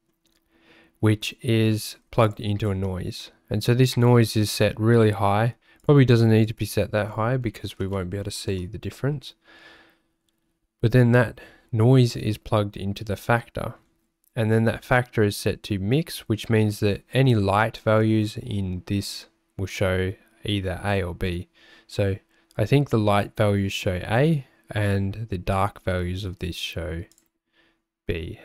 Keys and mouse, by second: 1.8 click, 2.3 ctrl+shift+click, 5.9-8.8 drag, 27.2-28.4 drag.